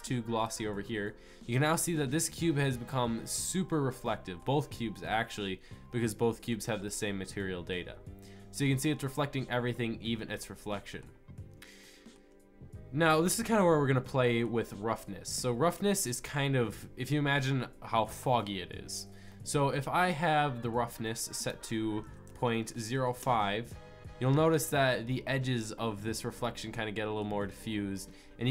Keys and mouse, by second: 4.8 middle drag, 6.0 middle click, 6.2-8.6 middle drag, 10.4-16.8 middle drag, 19.3-22.2 middle drag, 22.2-23.5 drag, 26.4-28.5 middle drag.